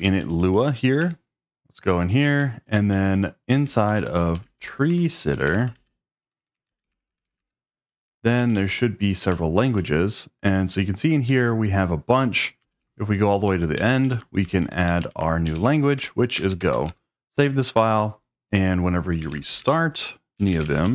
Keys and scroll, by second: 0.0-0.3 typing, 1.0 Return, 2.6 ctrl+d, 2.8 ctrl+d, 3.3-11.2 typing, 12.8-17.2 typing, 19.0-20.9 typing.